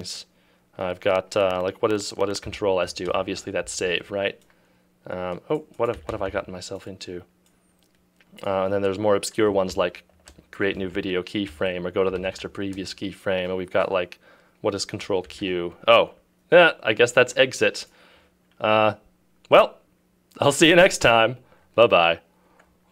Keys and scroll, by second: 2.5 v, 3.1 ctrl+s, 6.0 f, 9.8 shift+s, 11.0-12.8 typing, 15.3 ctrl+q.